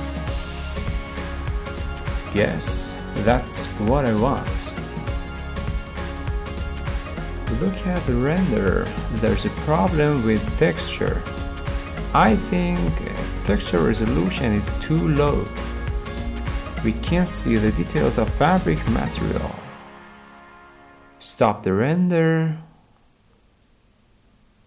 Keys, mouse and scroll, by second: 4.8 click, 13.2 click, 13.7-14.1 scroll, 14.5 middle click, 16.0 middle click, 16.0 middle click, 16.1 middle click, 16.9 middle click, 17.5 middle click, 18.3-21.5 middle drag, 21.8-22.9 drag, 23.2-24.3 drag, 24.5-24.6 drag.